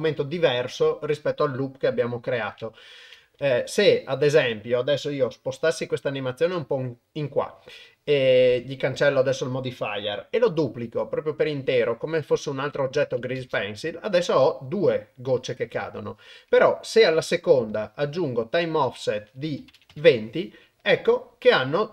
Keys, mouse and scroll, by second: 3.4 ctrl+Tab, 5.6 g, 10.5 shift+d, 13.4 shift+space, 16.5-17.8 drag, 18.8-20.0 drag.